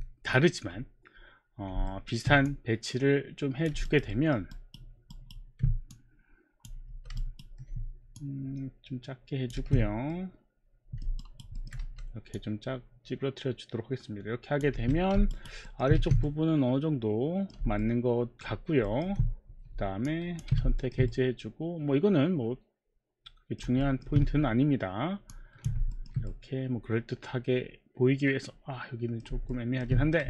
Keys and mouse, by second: 1.8 alt+middle click, 2.5 click, 3.9 alt+right click, 4.5 alt+middle click, 5.1 alt+right click, 5.5 alt+right click, 6.1 click, 6.9 r, 7.2 alt+right click, 8.2 click, 9.6 w, 10.2 middle click, 11.3 alt+right click, 11.6 alt+middle click, 11.8 r, 12.3 click, 14.7 w, 15.3 alt+right click, 15.6 alt+middle click, 16.2 alt+middle click, 16.2 w, 16.3 middle click, 17.8 alt+middle click, 18.7 alt+middle click, 18.9 alt+middle click, 20.1 ctrl+click, 20.8 alt+middle click, 24.1 alt+middle click, 25.4 ctrl+click, 25.9 alt+middle click, 26.2 middle click, 29.5 alt+middle click.